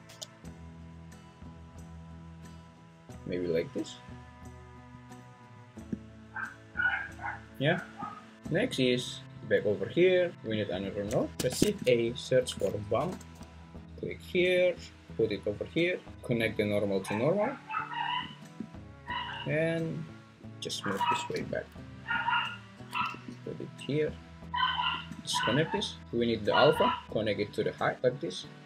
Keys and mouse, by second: 0.1 z, 4.9 click, 9.4 click, 9.6 click, 11.3 shift+a, 16.4 click, 16.6-17.4 drag, 20.4 click, 21.2 g, 23.1 g, 24.9-25.8 drag, 26.8-28.0 drag.